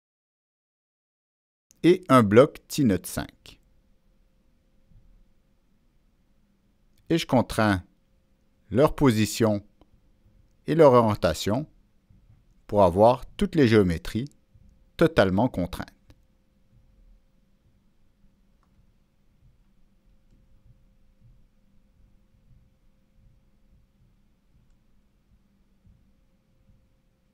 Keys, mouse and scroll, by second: 0.4 click, 1.4 click, 2.2 Escape, 2.7 click, 6.2 click, 7.7 click, 9.0-10.4 drag, 12.0-13.8 drag, 15.2-16.5 drag, 17.6-19.2 drag, 20.2 click, 21.6 click, 23.5 click, 24.6 click, 26.5 middle click.